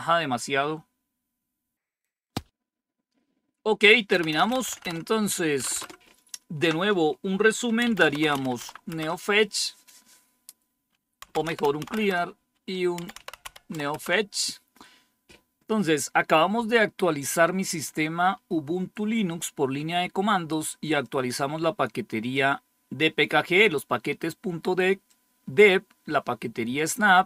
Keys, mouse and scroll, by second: 4.9 BackSpace, 5.5 Return, 5.7 Return, 7.5-8.8 typing, 8.8 Return, 10.9-13.9 typing, 20.9-23.1 drag, 25.0-27.2 drag.